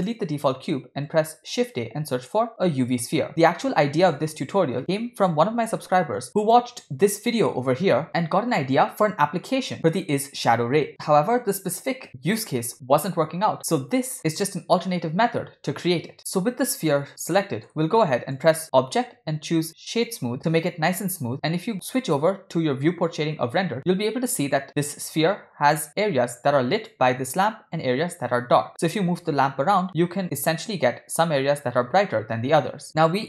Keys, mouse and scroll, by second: 0.1 x, 1.8 shift+a, 4.7 middle click, 4.7-5.1 scroll down 1, 5.1 middle click, 5.8 g, 16.7-17.2 scroll up 1, 17.2 scroll down 1, 18.0 shift+middle click, 18.4-22.9 drag, 27.1 click, 29.1 g.